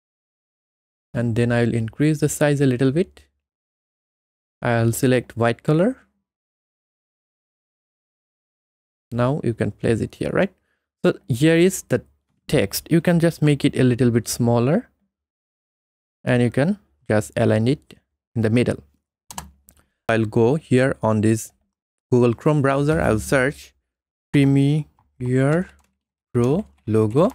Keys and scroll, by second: 19.4 Return, 24.1-27.3 typing.